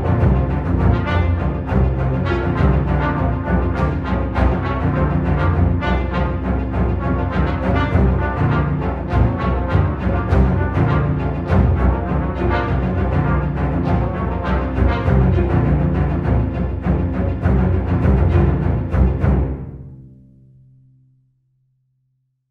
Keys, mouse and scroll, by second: 2.6-14.2 drag, 14.2-16.7 alt+drag, 16.9-20.3 drag.